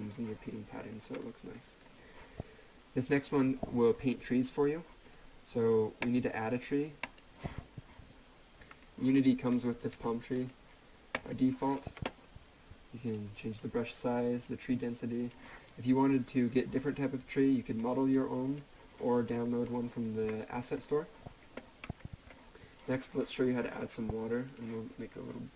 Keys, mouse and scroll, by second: 0.4 scroll up 1, 1.2 middle click, 3.1 click, 6.0 click, 7.9-8.7 scroll down 1, 8.7 click, 20.3 middle click, 22.3 scroll down 1, 24.5 click.